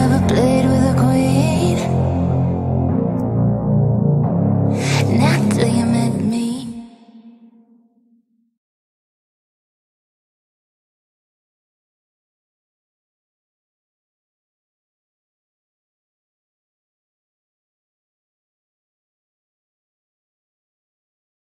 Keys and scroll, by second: 13.1 F3, 13.6 Escape, 14.1 F3, 14.5 Escape, 15.5 shift+F2, 19.6 Caps_Lock, 19.8 h, 20.3 e.